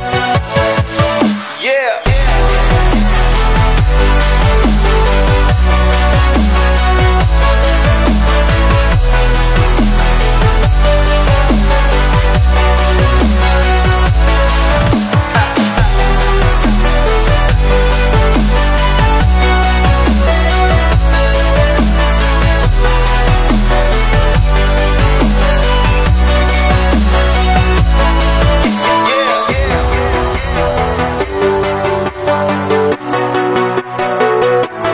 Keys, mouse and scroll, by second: 2.3 click, 5.1 scroll up 1, 5.2 middle drag, 5.5 click, 5.8 shift+middle click, 6.3-8.3 drag, 10.6 click, 11.1-11.5 drag, 13.3 click, 13.7 click, 18.4-20.0 drag, 23.8-24.2 scroll up 3, 24.0 shift+middle drag, 24.5 shift+middle drag, 24.7 click, 25.1 click, 29.5 drag, 30.3 scroll up 2, 30.6-30.9 shift+middle drag, 30.9-31.5 scroll down 5, 31.5-31.9 middle drag, 31.9 click, 32.7 shift+d, 33.3 click, 33.6 middle drag, 33.8-34.2 scroll up 1, 34.2 shift+middle click, 34.5 s.